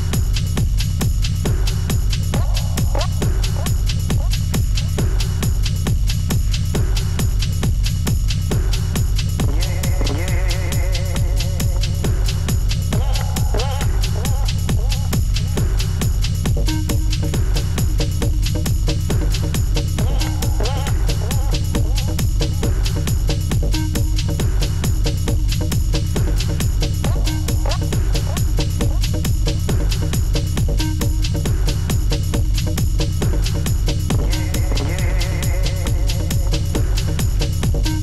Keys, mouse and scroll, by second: 1.5 alt+scroll up 3, 1.9 double click, 2.1 space, 2.2 shift+1, 2.5 Return, 3.2 double click, 3.4 double click, 3.7 space, 3.8 shift+1, 3.9 Return, 5.1-5.6 alt+scroll down 3, 6.1 Return, 6.3 Up, 7.5 space, 8.0 space, 8.5 alt+scroll down 1, 8.7 alt+scroll up 1, 10.7-11.3 scroll down 2, 15.8 alt+click, 16.1 space, 16.4 space, 17.6 ctrl+click, 18.0 ctrl+click, 20.7 double click, 20.9-21.3 scroll down 2, 21.4 ctrl+click, 21.6 ctrl+click, 23.1 space, 23.3 space, 23.7 double click, 24.2 ctrl+click, 24.4-24.7 scroll up 2, 25.2-25.6 scroll up 1, 25.6 ctrl+click, 26.2 ctrl+click, 26.4 ctrl+scroll up 1, 26.7 ctrl+click, 27.0 ctrl+click, 29.3 ctrl+click, 29.4 ctrl+click, 29.7 ctrl+shift+Up, 30.4-31.0 space, 33.1 alt+Tab, 33.5 Return, 36.4 Return, 36.6 ctrl+u, 37.9 Return.